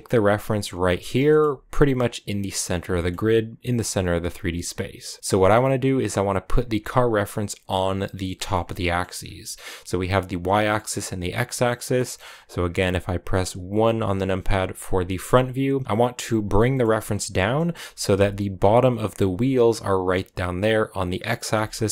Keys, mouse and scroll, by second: 1.1-4.2 shift+middle drag, 4.2 click, 5.1 scroll up 1, 5.2 g, 6.8-7.6 scroll down 2, 8.1 middle click, 8.5 scroll down 1, 8.6 middle click, 9.1-9.4 scroll down 3, 11.8-13.8 middle drag, 13.8 KP_1, 14.4-15.6 scroll up 6, 14.9 shift+middle click, 15.6 g, 16.6 shift+middle click, 16.7-17.3 scroll up 3, 17.4 shift+middle click, 18.0 g, 21.5 KP_3.